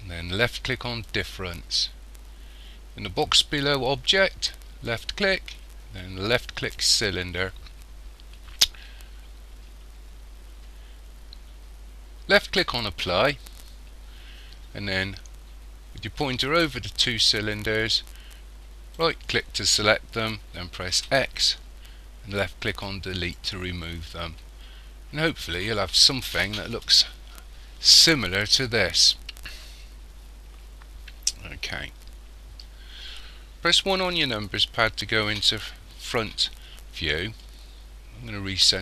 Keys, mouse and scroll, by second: 4.9 click, 12.6 click, 19.0 right click, 21.0 x, 24.5-24.8 scroll up 4, 25.4 scroll up 3, 29.1-29.8 scroll down 2, 30.0-30.3 scroll down 4, 30.7 scroll down 1, 34.2 KP_1, 37.4 shift+middle click.